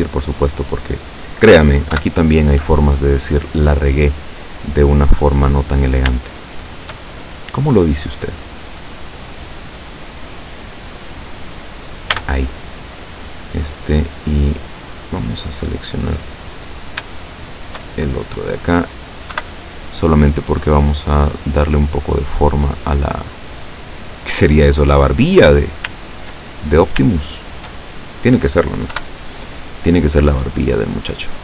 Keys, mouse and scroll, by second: 0.0-1.5 drag, 2.0 KP_7, 3.2-5.5 drag, 5.7-6.2 scroll up 1, 6.4 shift+middle click, 9.3-11.6 drag, 12.2 a, 13.2 right click, 13.5 middle click, 17.5 shift+right click, 17.9 shift+middle click, 19.4 KP_7, 20.2 click, 23.8-25.1 middle drag, 25.7 right click, 26.7 shift+right click, 27.4 shift+right click, 29.0 KP_7, 30.5-31.4 drag.